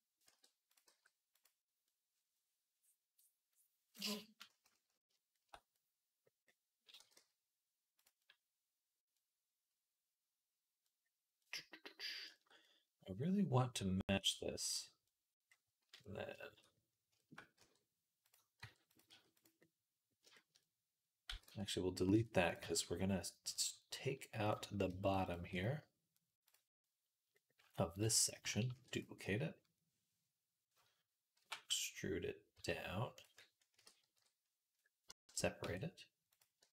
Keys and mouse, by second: 0.1-1.7 drag, 0.1 r, 0.7 g, 1.7 middle click, 2.3-6.4 drag, 5.8 right click, 6.5 click, 6.8 g, 8.0-11.2 drag, 12.2 shift+middle click, 14.8-15.8 middle drag, 15.8-21.5 drag, 17.4 e, 18.4 r, 18.9 s, 21.1 x, 22.0 Tab, 22.5 Tab, 23.4 click, 24.1 middle click, 25.0 alt+shift+click, 25.1 alt+shift+middle click, 27.4 ctrl+middle click, 27.8 ctrl+click, 27.8 ctrl+middle click, 28.5 shift+d, 31.2 e, 33.6 ctrl+l, 33.6-36.2 ctrl+middle drag, 33.9 p, 35.5 Tab, 36.2 click, 36.4 Tab, 36.4 middle click.